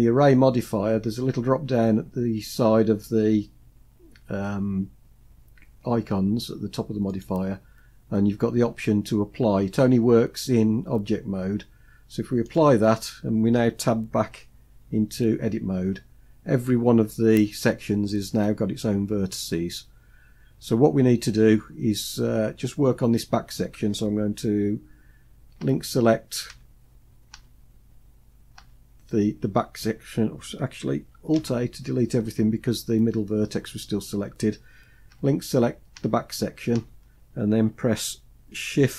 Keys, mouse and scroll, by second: 6.8-12.3 drag, 14.5 Tab, 20.2 scroll up 1, 25.3 l, 26.2 l, 27.0 l, 30.8 l, 31.0 alt+a, 34.8 l, 35.6 l, 36.4 l.